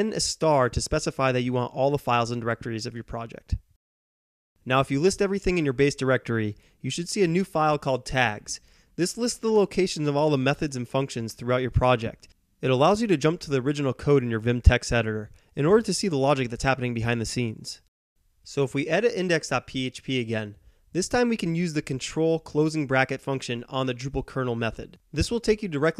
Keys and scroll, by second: 0.0 Return, 2.0 typing, 5.1-5.6 typing, 5.4 Return, 13.5-14.7 typing, 18.3-21.2 typing, 24.1 ctrl+].